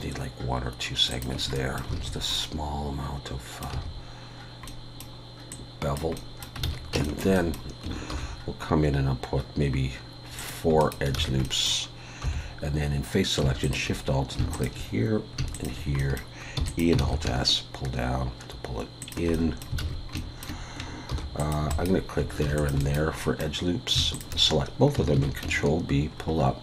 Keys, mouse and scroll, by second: 1.6 middle click, 2.0 alt+a, 2.4 middle click, 3.7 a, 4.7 middle click, 5.5 click, 6.2 middle click, 6.7 alt+a, 7.0 shift+middle click, 7.4 middle click, 8.1 ctrl+r, 11.2 alt+a, 11.4 middle click, 12.2 3, 13.6 alt+shift+click, 14.5 alt+shift+click, 16.0 middle click, 16.6 e, 17.0 alt+s, 19.3 middle click, 19.8 alt+a, 20.2 shift+middle click, 21.1 ctrl+r, 24.1 alt+shift+click, 25.2 ctrl+b.